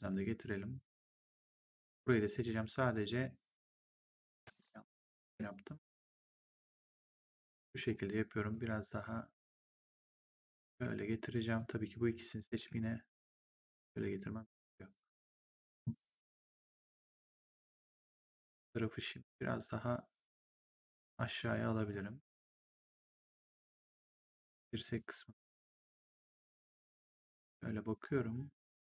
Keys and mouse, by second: 1.3 click, 3.1 click, 5.1 ctrl+z, 6.6 click, 7.7 w, 8.4 click, 11.5 click, 12.5 w, 13.0 click, 20.7 click, 21.8 click, 24.0 click.